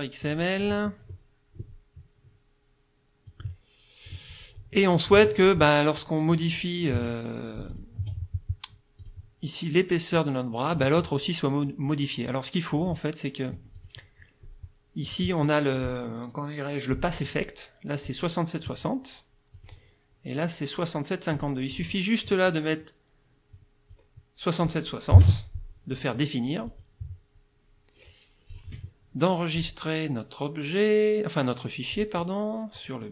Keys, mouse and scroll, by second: 0.2 click, 0.9 click, 3.3-4.3 drag, 5.2 F2, 5.4 click, 6.4 F1, 7.0 F2, 7.6 F1, 7.7 click, 9.0 click, 10.2 click, 13.6 F1, 13.8 click, 15.1 click, 19.6 click, 21.4 click, 21.7 click, 23.6 click, 25.2 KP_6, 25.3 KP_0, 26.7 click, 28.5 click, 29.6 click, 31.9 click.